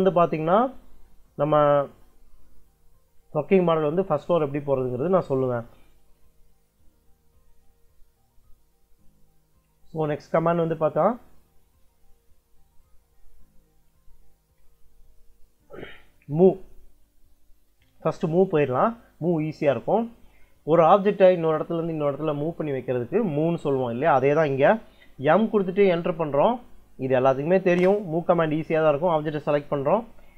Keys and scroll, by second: 25.2 m, 27.6 space.